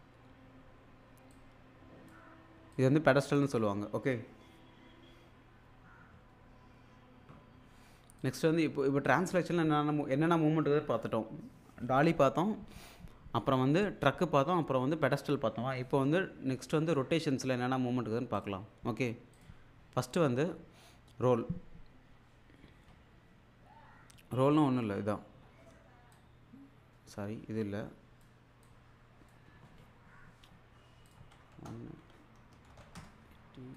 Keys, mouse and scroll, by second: 1.3-2.3 drag, 8.2 click, 16.8 right click, 18.3 click, 26.1-28.3 drag, 31.1 click.